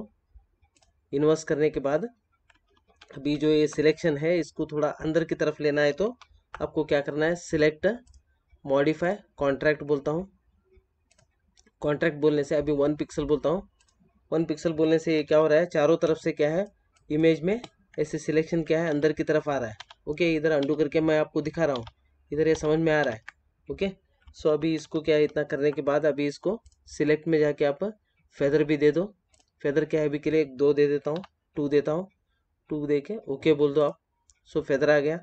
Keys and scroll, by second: 2.7 ctrl+=, 6.0 ctrl+-, 15.0 ctrl+=, 16.0 space, 18.8 ctrl+z, 24.4 ctrl+-.